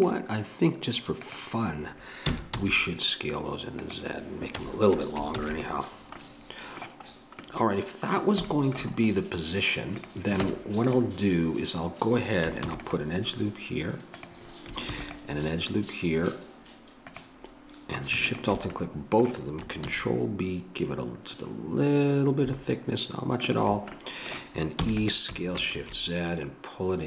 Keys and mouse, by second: 1.2-3.8 drag, 4.5 a, 5.4 ctrl+s, 10.0 click, 10.4 Tab, 12.7 ctrl+r, 14.9 ctrl+r, 18.3-19.8 drag, 19.8 ctrl+b, 24.8 e.